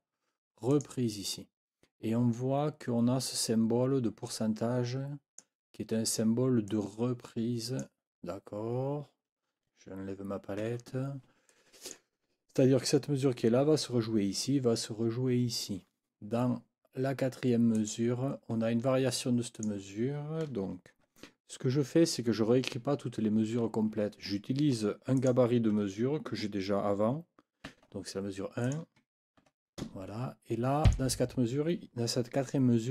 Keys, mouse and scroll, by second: 0.7 click, 4.3-5.6 drag, 6.7-8.0 drag, 10.6 F9, 11.5 click, 17.7 click, 19.5 click, 25.1 click, 27.7 ctrl+c, 28.6 click, 29.4 ctrl+v, 30.9 click.